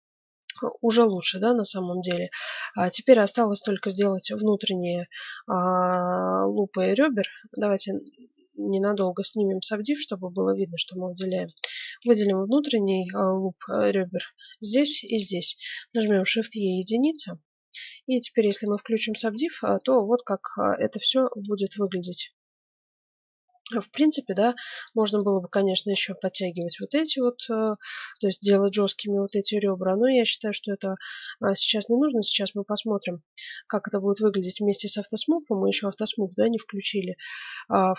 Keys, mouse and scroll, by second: 1.1 Tab, 1.8-5.5 middle drag, 7.5-9.2 drag, 8.2-9.6 middle drag, 10.0-13.7 right drag, 13.7-14.9 middle drag, 14.9-16.7 right drag, 15.9 shift+e, 17.1-18.6 middle drag, 18.6 click, 19.1 Tab, 19.7 middle click, 20.0 click, 20.3-21.7 middle drag, 21.4 Tab, 22.6-24.4 middle drag, 24.8-26.5 right drag, 25.3-30.2 middle drag, 26.8-28.8 right drag, 30.6 Tab, 32.1 click, 33.8-37.0 middle drag, 37.7-37.9 drag.